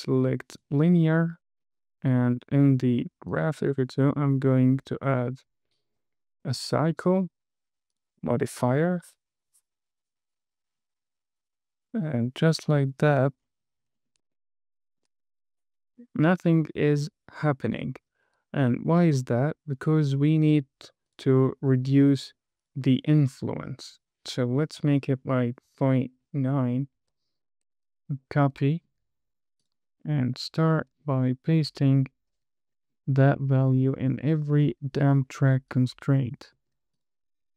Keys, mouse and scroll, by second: 2.6-3.7 drag, 8.3 click, 8.9-10.8 drag, 12.4-13.3 drag, 13.7-14.4 scroll down 5, 14.7 shift+middle click, 15.5 space, 18.1 space, 18.9 click, 19.7-20.3 scroll up 3, 20.5 shift+middle click, 21.4 click, 22.9 click, 24.2-26.9 drag, 28.8 super+c, 29.9 click, 31.0 super+v, 32.1 click, 32.9 super+v, 33.9 click, 34.8 super+v, 36.0 click, 36.9 super+v, 37.2 click.